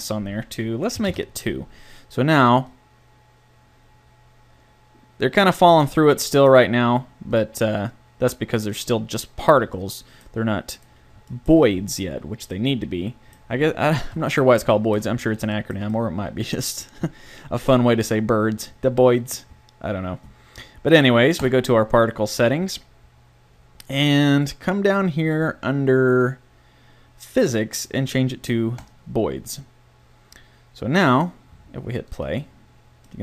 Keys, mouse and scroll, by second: 2.7-4.5 drag, 7.4-8.8 drag, 11.6-14.2 middle drag, 21.4-23.4 drag, 28.8-30.8 drag, 32.1-33.1 drag, 33.1 middle click.